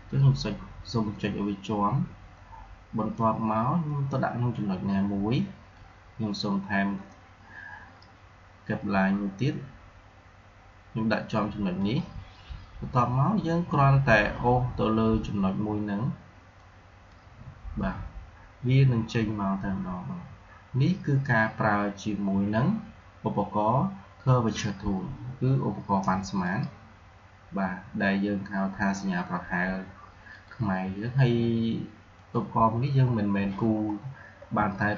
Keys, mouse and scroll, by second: 5.7-10.5 drag, 11.7 click, 16.5-19.5 drag, 26.3 click, 30.2 click, 33.0-33.7 scroll down 1, 34.5 scroll up 1, 34.6 alt+scroll down 1.